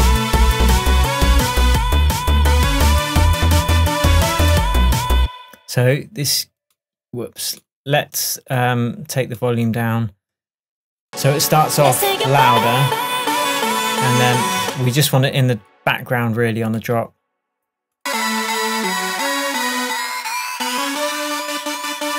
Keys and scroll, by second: 5.2 space, 14.7 space.